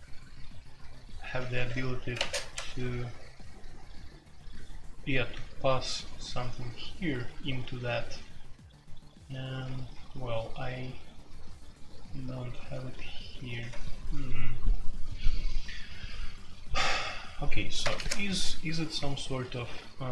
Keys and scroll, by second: 1.5 Escape, 1.5-2.1 typing, 1.6 F2, 2.5 Tab, 5.1 typing, 7.4-8.0 typing, 8.0 ctrl+u, 10.8-11.3 typing, 17.8 super+k.